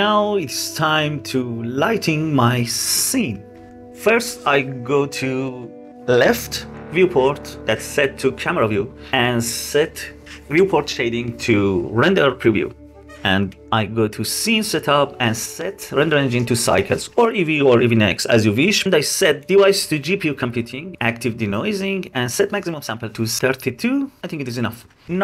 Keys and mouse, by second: 0.3-1.0 drag, 9.8 click, 12.9 click, 13.6-15.1 drag, 17.7-19.6 drag, 20.4 click, 20.9-23.3 drag.